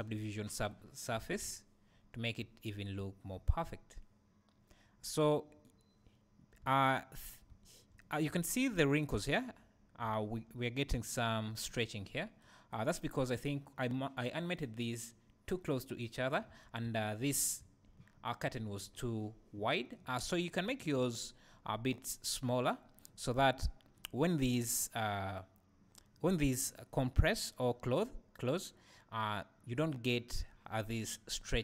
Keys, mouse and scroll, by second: 0.5 ctrl+2, 1.2 alt+a, 2.7 scroll up 1, 3.4 scroll down 1, 10.8 scroll up 1, 11.0 `, 14.6 click, 16.5-17.4 scroll down 2, 17.4 `, 18.5-20.2 scroll down 1, 20.2 scroll up 1.